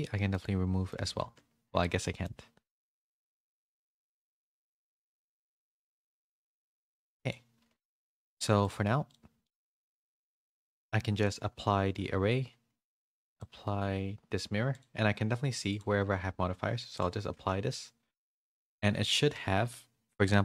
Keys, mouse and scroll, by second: 0.3 middle click, 0.3 x, 1.2 ctrl+z, 1.9 middle click, 4.0 click, 6.0-7.3 drag, 8.0 shift+middle click, 8.6 click, 9.0 click, 9.4 shift+middle click, 9.7 middle click, 11.1 click, 11.8 ctrl+a, 12.8 click, 15.7-17.2 drag, 17.2 ctrl+a, 18.9 Tab, 19.3 a.